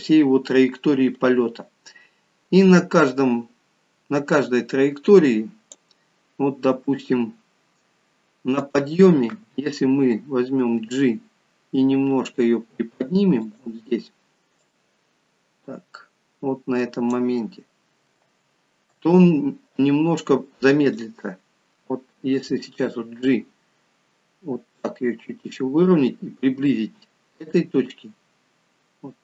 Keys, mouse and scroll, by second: 4.9 click, 4.9 scroll down 4, 7.3 scroll up 4, 8.7 click, 10.8 g, 14.6 click, 18.2 space, 19.0 space, 20.9 click, 23.1 g.